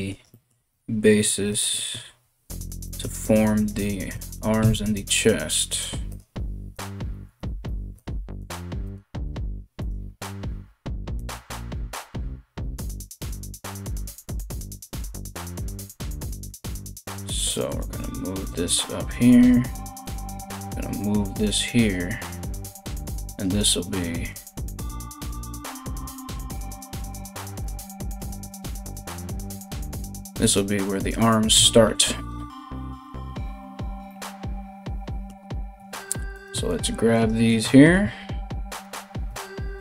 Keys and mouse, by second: 0.2 g, 1.6 g, 3.1 right click, 3.3-6.3 middle drag, 3.3 g, 4.2 KP_3, 5.3 g, 6.3 right click, 6.4-8.0 middle drag, 6.4 g, 8.0 right click, 8.1-17.4 middle drag, 8.1 g, 9.4 right click, 9.7 g, 11.6 right click, 11.8 g, 13.4 right click, 13.6 g, 14.2 right click, 14.4 g, 14.7 right click, 14.9-16.1 right drag, 16.2 g, 17.4 right click, 17.5-28.7 middle drag, 17.5 g, 18.6 right click, 18.8 g, 19.6 right click, 19.8 g, 21.0 right click, 21.1 g, 22.6 right click, 22.7 g, 23.6 g, 24.4 right click, 24.7 g, 25.7 right click, 25.9 g, 26.6-28.1 right drag, 26.7 g, 28.1 g, 28.7 right click, 28.8-30.0 middle drag, 28.8 g, 30.0 right click, 30.1-39.8 middle drag, 30.1 g, 31.1 KP_1, 35.4 3, 35.9 right click, 36.3 right click, 36.7 right click, 37.1 right click, 38.3 ctrl+right click, 39.4 KP_3.